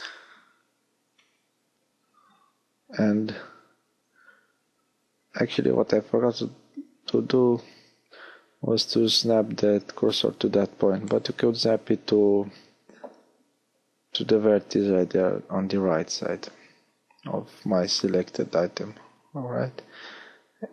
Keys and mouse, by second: 0.4 ctrl+z, 2.1 shift+s, 5.2 x, 9.4 g, 10.8 shift+d, 18.0 r, 19.3-20.7 middle drag.